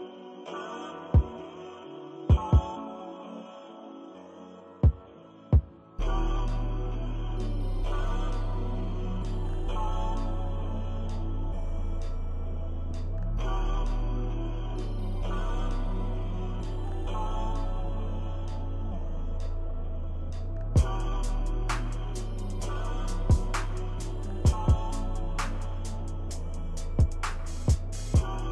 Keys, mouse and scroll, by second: 0.5 ctrl+-, 0.8 ctrl+=, 0.9 ctrl+=, 1.1 ctrl+=, 1.4 click, 1.6 click, 1.8 click, 2.0 shift+click, 2.6 ctrl+-, 3.0 ctrl+=, 3.4 click, 3.8 ctrl+-, 4.1 click, 4.1 scroll up 2, 4.2 ctrl+=, 4.4 click, 5.1 click, 5.7 ctrl+-, 5.8 ctrl+scroll down 1, 5.9 click, 6.2 ctrl+-, 6.2 ctrl+=, 6.5 click, 7.3 ctrl+-, 7.6 click, 7.8 click, 8.0 click, 8.8 ctrl+-, 9.0 ctrl+=, 9.0 click, 9.5 ctrl+-, 9.5 ctrl+=, 9.6 click, 9.8 click, 10.3 ctrl+-, 10.6 ctrl+=, 10.7 ctrl+=, 11.2 ctrl+=, 11.2 ctrl+middle click, 11.4 click, 11.8 ctrl+-, 11.9 ctrl+=, 12.2 ctrl+-, 12.3 click, 12.7 ctrl+=, 12.9-13.9 drag, 13.9 ctrl+-, 14.0 ctrl+scroll down 1, 14.1 ctrl+=, 14.1 scroll up 1, 14.2 click, 15.0 ctrl+-, 15.2 ctrl+=, 15.4 middle click, 15.6 click, 16.0 ctrl+-, 16.3 click, 16.5 ctrl+=, 16.6 click, 17.1 click, 17.4 ctrl+-, 18.0 click, 18.0 ctrl+=, 18.2 click, 18.6 click, 19.1 click, 19.4 ctrl+-, 19.5 ctrl+=, 19.6 click, 20.3 ctrl+-, 20.3 ctrl+scroll down 1, 20.6 click, 21.3 ctrl+-, 21.5 ctrl+=, 21.6 click, 22.0 ctrl+-, 22.2 ctrl+=, 22.3 click, 23.0 ctrl+-, 23.3 ctrl+=, 23.4 click, 23.7 ctrl+-, 23.9 ctrl+=, 24.1 ctrl+=, 24.2 click, 24.3 ctrl+-, 24.4 ctrl+=, 24.7 right click, 24.8 click, 25.4 click, 26.4 click, 27.0 ctrl+=, 27.2 click, 27.7 ctrl+-, 28.1 ctrl+-, 28.3 click.